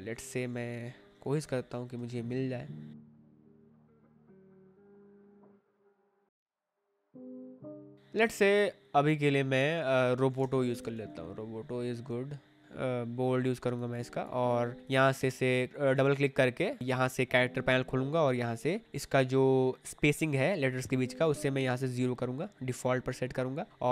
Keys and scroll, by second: 1.2 a, 1.9 Caps_Lock, 10.3-11.4 typing, 12.6 v, 15.1 Escape.